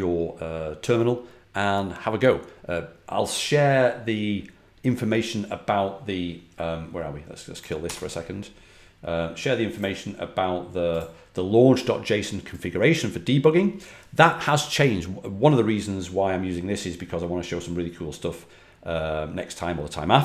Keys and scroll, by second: 7.5-8.2 typing.